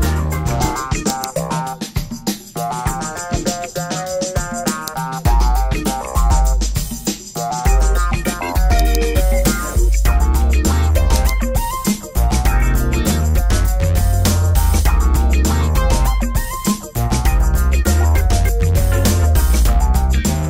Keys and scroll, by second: 19.2 Tab, 20.2 BackSpace.